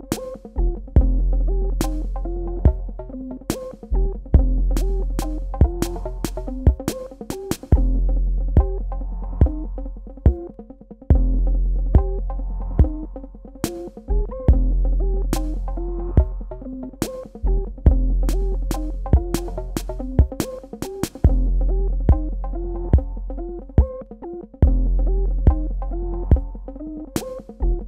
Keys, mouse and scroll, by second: 0.8 ctrl+z, 1.1 typing, 2.9 click, 12.7 ctrl+space, 12.8 ctrl+click, 13.3 space, 14.1 ctrl+alt+click, 15.0 Tab, 15.4 click, 15.6 space, 16.5 click, 18.4 g, 20.1 KP_Add, 23.4 super+KP_Subtract.